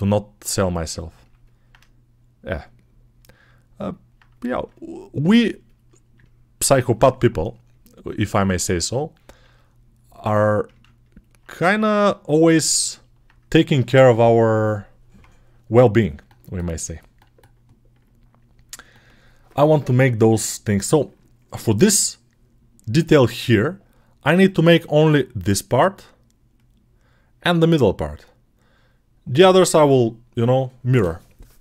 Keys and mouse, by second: 27.6-31.6 right drag.